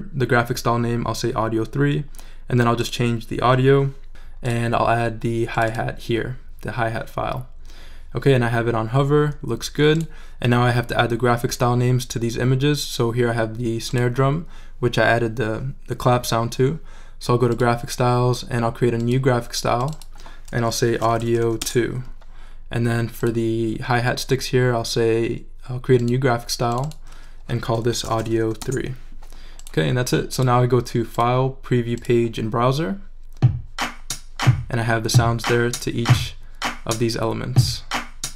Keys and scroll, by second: 20.6-21.9 typing, 27.5-28.9 typing.